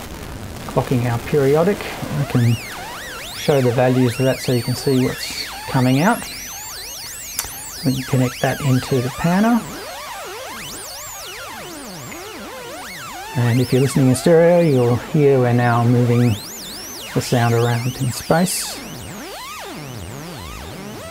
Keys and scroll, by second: 2.7 super+3.